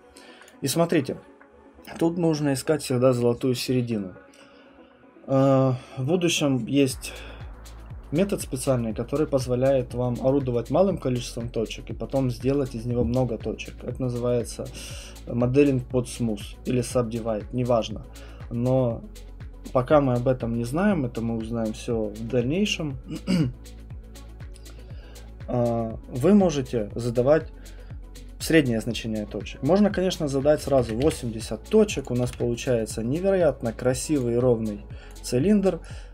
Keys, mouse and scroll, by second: 0.5 click, 28.4 click, 30.4-32.2 typing, 31.7 scroll, 32.0 click, 34.2 click, 35.1 click.